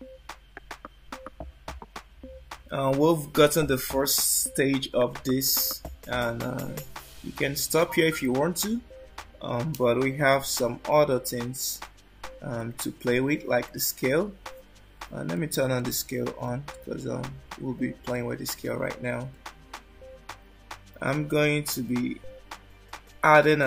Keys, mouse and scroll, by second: 7.9 click, 12.7 click, 15.5 click, 15.9 click, 16.5 click, 17.3 click, 19.3 click, 23.5 shift+a.